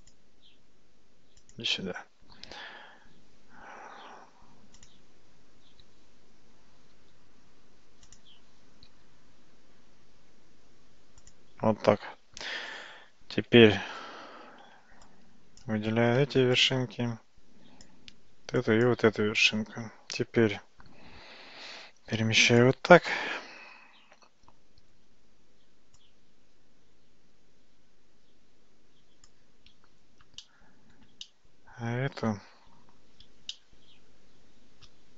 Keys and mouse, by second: 0.1 click, 2.6 g, 6.0 f, 7.0 g, 9.0 g, 13.5 Tab, 15.2 click, 18.7 shift+click, 21.6 g, 26.1-27.3 drag, 27.3-29.4 middle drag, 30.5 shift+middle click, 31.3-32.4 middle drag, 33.6-35.1 shift+middle drag.